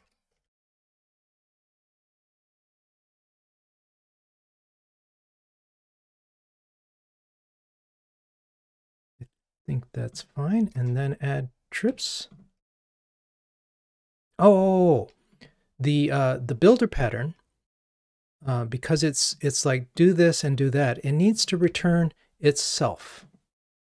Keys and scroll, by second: 8.7 ctrl+Tab, 10.8 alt+Return, 21.9 super+b.